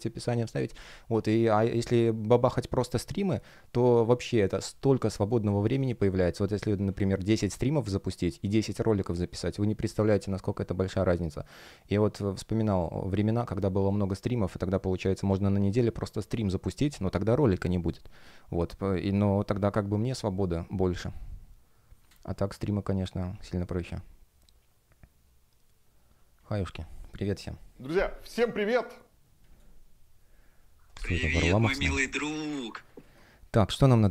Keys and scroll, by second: 10.3 space, 20.2 space, 28.3 space, 31.7 space, 32.9 space, 33.8 space.